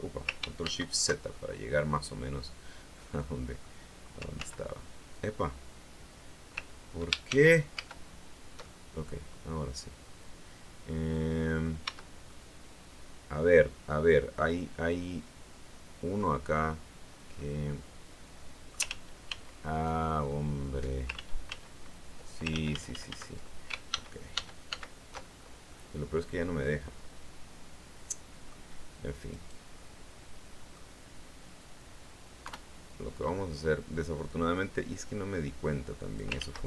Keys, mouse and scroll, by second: 0.5 ctrl+shift+z, 1.2-2.4 ctrl+shift+drag, 2.9 click, 4.2 ctrl+z, 7.2 ctrl+shift+z, 8.5-11.7 ctrl+shift+middle drag, 11.8 Tab, 12.2-16.2 middle drag, 17.2-18.8 middle drag, 18.8 ctrl+z, 20.2 ctrl+click, 21.1 ctrl+z, 22.4 ctrl+z, 23.8 ctrl+shift+z, 25.6-28.6 middle drag, 29.2 right click, 29.6-30.8 middle drag, 32.3 KP_3, 34.2-36.2 drag, 36.2 ctrl+z.